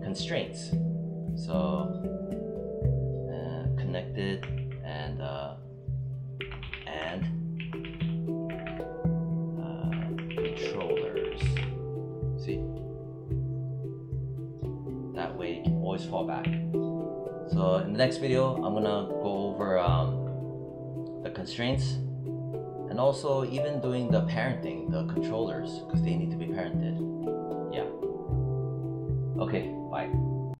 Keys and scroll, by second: 4.4 shift+-, 6.0-8.3 typing, 9.8-10.8 typing, 16.3 w.